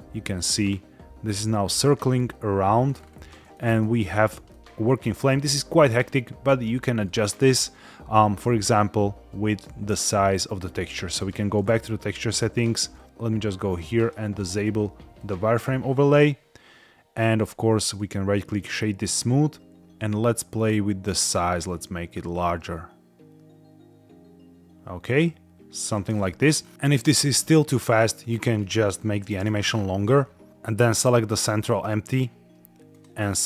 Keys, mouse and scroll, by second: 0.4-0.7 scroll down 2, 2.8-3.3 scroll up 4, 3.4 shift+middle drag, 4.0-4.4 scroll up 3, 4.4-4.9 shift+middle drag, 6.9 click, 11.1 click, 13.9-15.7 drag, 17.3 scroll up 1, 17.7-18.7 right drag, 19.9-25.7 shift+drag, 26.0-26.5 scroll down 4, 26.7 shift+middle click, 26.7 space, 27.0 space, 28.1-29.6 drag, 30.8 click, 31.6 click, 32.8 click.